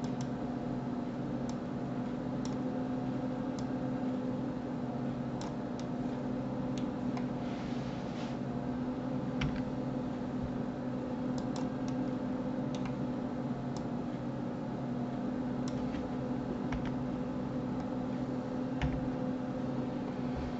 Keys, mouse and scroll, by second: 1.5-5.8 drag, 5.8-8.8 middle drag, 11.9-13.8 middle drag, 13.8-16.7 drag, 16.7 KP_1, 18.8 KP_3, 19.7 scroll up 2.